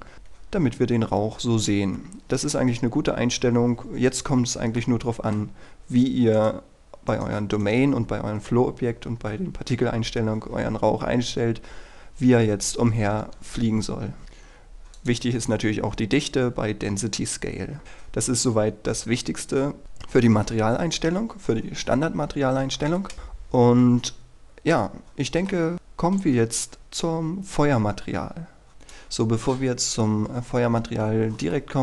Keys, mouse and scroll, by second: 4.9-6.0 middle drag, 6.4 right click, 15.0 click, 24.8 middle click, 28.7 click, 31.7-31.8 middle drag.